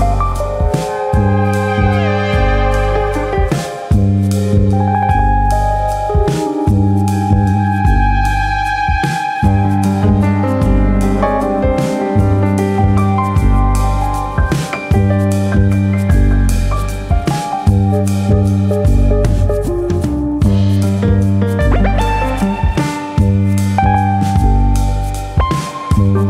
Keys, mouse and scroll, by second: 0.1 right click, 3.3 click, 4.2 click, 13.4 click, 14.0 middle click, 14.4-15.5 scroll up 2, 14.6 shift+middle click, 15.5 p, 17.4 Tab, 17.7 click, 19.5 click, 20.6 Tab, 20.9 middle click, 21.2 a, 21.9 KP_1, 22.4 scroll up 2, 22.7 shift+middle click, 23.1 middle click, 23.6 shift+middle click, 24.1 s, 25.9 click.